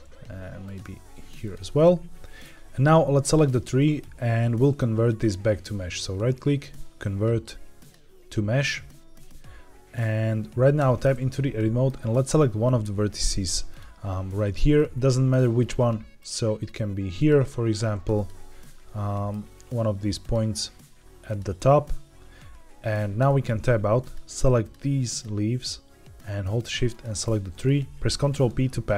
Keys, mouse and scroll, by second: 0.5 click, 0.8 g, 1.3 click, 1.7 middle click, 3.2 click, 3.7 middle click, 4.5 middle click, 5.8-7.8 right drag, 9.1-9.9 middle drag, 10.7 Tab, 11.2 middle click, 13.6 click, 14.3-14.7 scroll up 1, 14.7 middle click, 16.1 click, 17.1 click, 17.7 1, 18.0 click, 18.6 middle click, 20.1 click, 21.2 click, 22.7-23.1 scroll down 2, 23.1 Tab, 23.9 click, 24.5 shift+click, 25.0 shift+click, 26.8 shift+click, 28.1 ctrl+p.